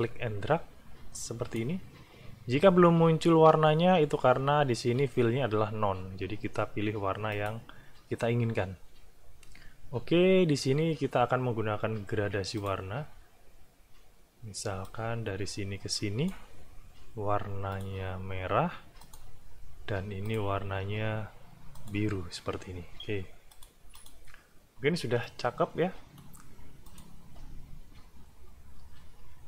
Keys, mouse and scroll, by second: 0.0-1.8 drag, 7.3 click, 12.6 click, 14.8-16.5 drag, 16.5-17.7 middle drag, 17.7 click, 19.0 click, 20.3 click, 21.7 click, 23.5 click, 23.9 click, 25.2 click, 25.2-26.4 right drag, 26.9 click.